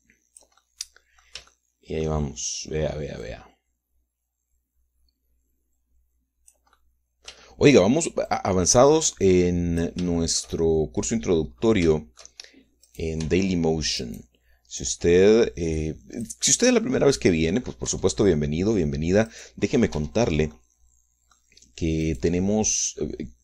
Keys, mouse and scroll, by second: 0.3-1.6 drag, 1.6-3.2 middle drag, 4.2-7.7 drag, 8.3 shift+middle click, 9.3-11.0 drag, 11.1-12.5 shift+middle drag, 12.9 shift+middle click, 13.9 click, 14.2 Tab, 15.0 right click, 15.8-17.4 drag, 17.5-18.8 middle drag, 18.9 Tab, 20.3 right click, 20.9 Tab, 21.5-22.5 drag, 23.1 click.